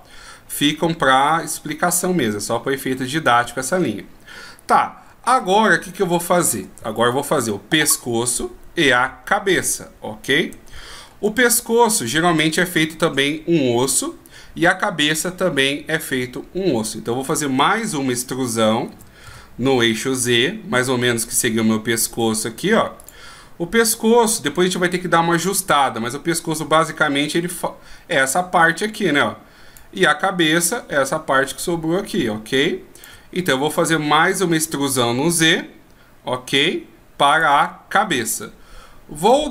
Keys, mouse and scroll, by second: 3.5 d, 5.5 shift+scroll up 1, 6.3-6.7 shift+scroll down 1, 10.9 shift+scroll up 1, 17.5 right click, 19.1 e, 26.0 d, 26.3 click, 29.9-30.7 d, 30.7 click, 33.2 d, 33.9 d, 34.4 e, 39.4 right click.